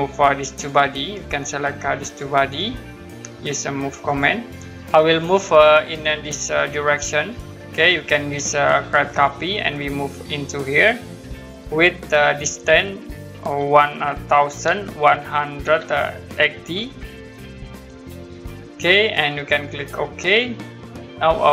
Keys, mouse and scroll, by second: 0.5 click, 2.0 click, 4.1 click, 7.1 click, 9.1 click, 14.6 1, 18.0 typing, 20.2 click, 20.7 scroll down 1.